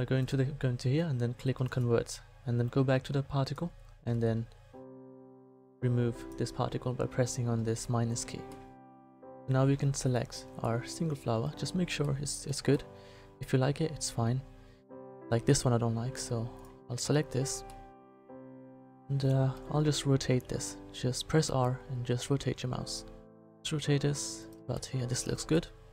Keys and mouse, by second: 0.2-8.0 drag, 14.5 middle click, 14.9 middle click, 17.0 right click, 20.3 r, 24.7 middle click, 25.3 a.